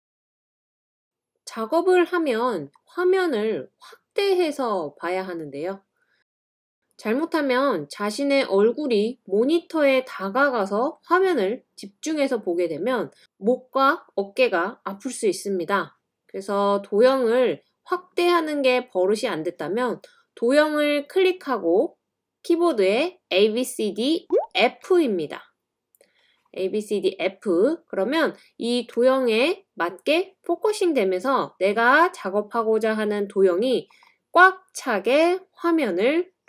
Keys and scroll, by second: 24.8 typing, 28.9 typing, 35.2 typing.